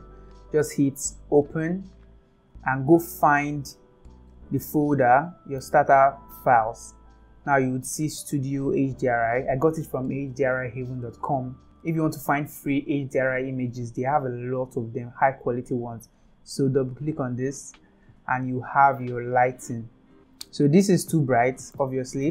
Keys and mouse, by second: 1.6 click, 21.9 shift+middle click.